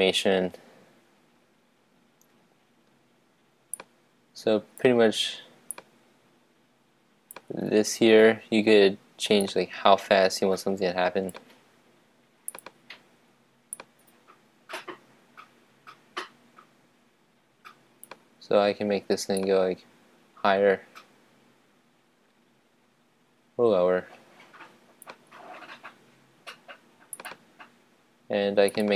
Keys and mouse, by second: 4.0 click, 7.7-11.5 drag, 13.9-15.9 drag, 19.6-21.3 drag.